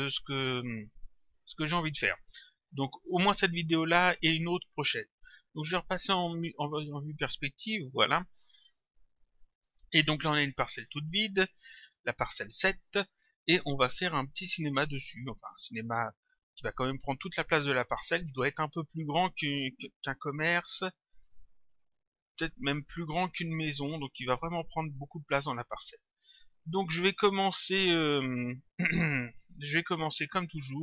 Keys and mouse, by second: 4.7 click, 6.7 click, 8.6 click, 10.4 click, 11.8 click, 16.8 click, 18.1 click, 23.5 click, 26.7 click, 30.4 click.